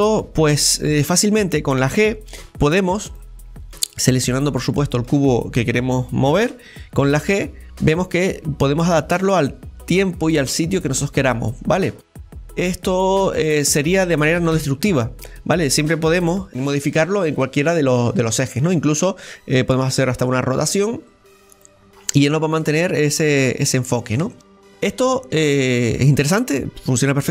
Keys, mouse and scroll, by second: 2.4 g, 3.7-5.0 right drag, 5.1-7.1 shift+middle drag, 7.1 g, 11.2 middle click, 11.7-12.5 scroll down 4, 12.2-17.9 middle drag, 17.9-18.3 scroll down 2, 18.3-21.9 middle drag, 21.9 scroll down 2, 22.2-23.2 middle drag, 23.2-23.9 scroll up 1, 23.9 shift+middle click, 24.7 scroll down 1, 24.9 scroll up 1, 25.1-27.3 middle drag.